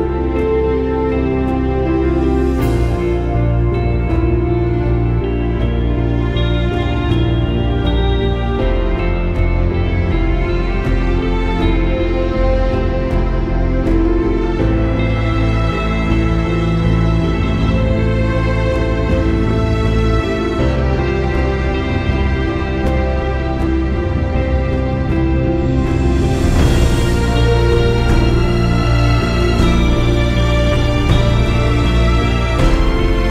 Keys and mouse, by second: 0.7 space, 1.0 click, 1.1 space, 2.4 click, 2.5 space, 2.7 click, 2.9 space, 4.2 click, 6.2 click, 7.3 click, 10.5 click, 11.7 click, 14.0 click, 14.6 click, 15.2 Delete, 16.2 click, 16.4 space, 16.6 click, 16.8 space, 17.3 click, 19.7 alt+shift+click, 21.1 space, 21.2 click, 21.7 click, 23.7 click, 25.0-26.2 drag, 27.8 alt+click, 33.2 click.